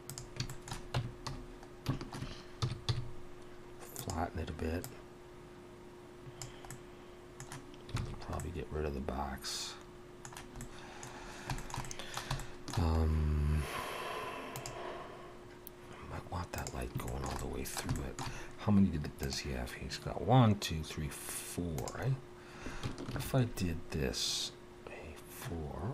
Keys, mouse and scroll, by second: 0.5 shift+middle click, 0.9 Tab, 1.3 a, 2.6 s, 4.8 click, 6.7 middle click, 8.0 alt+a, 8.4 middle click, 10.5 middle click, 11.2 scroll down 2, 11.6 shift+middle click, 11.8 middle click, 12.4 shift+middle click, 17.1 shift+middle click, 17.9 shift+middle click, 23.1 ctrl+r.